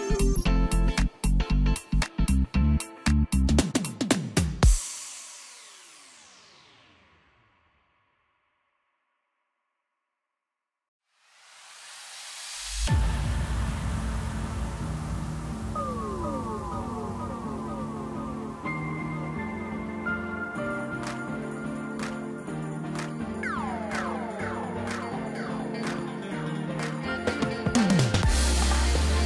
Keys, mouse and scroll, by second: 9.7 ctrl+r, 13.1 scroll down 1, 13.7-14.7 middle drag, 14.7-15.1 scroll up 1, 15.1-16.3 middle drag, 16.3 click, 16.8-18.2 middle drag, 18.2 click, 19.0 shift+click, 19.7 shift+click, 20.8 shift+click, 21.4 shift+click, 22.8 shift+click, 23.3-23.8 scroll down 2, 23.8 middle click, 24.4-24.7 scroll up 2, 24.7-25.8 middle drag, 25.8 e, 29.0-29.2 scroll up 1.